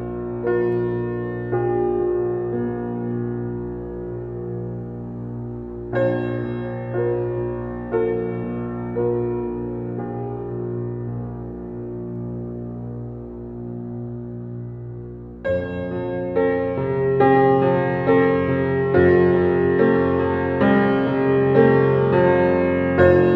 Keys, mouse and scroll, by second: 3.3-4.2 middle drag, 4.2 g, 5.4-5.8 scroll up 1, 7.2 click, 7.9-9.0 middle drag, 9.0 g, 10.3 s, 11.8 click, 12.2 click, 12.6 s, 13.9 g, 15.6-16.2 middle drag, 16.2 space, 16.2-16.8 middle drag, 17.4 shift+middle drag, 17.7 space, 18.7 g, 19.6-21.9 middle drag, 21.9 g.